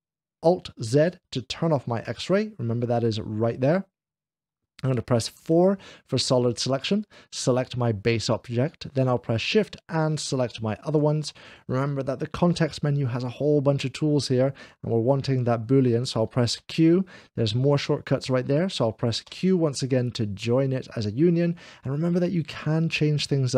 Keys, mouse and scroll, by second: 0.9 alt+z, 0.9 click, 5.5 4, 6.0-7.9 drag, 6.2 alt+z, 9.4-11.8 shift+drag, 9.6 shift+l, 16.6 q, 19.1 q, 19.3 q.